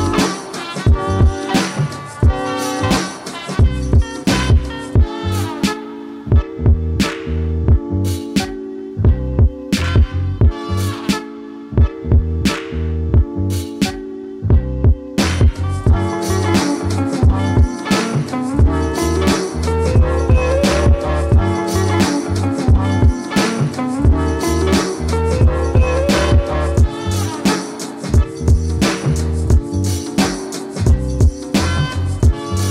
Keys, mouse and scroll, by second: 0.1 ctrl+Num_Lock, 0.1 click, 0.6-8.2 ctrl+drag, 9.2-12.7 ctrl+drag, 15.9-19.2 drag, 24.1 click, 25.8 click, 30.2 click.